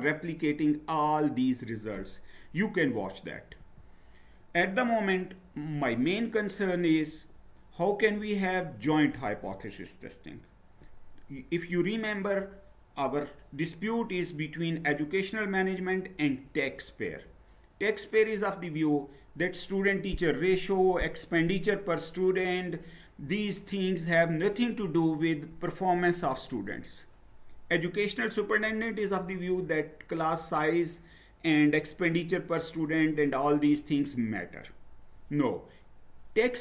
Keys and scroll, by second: 3.6 Down.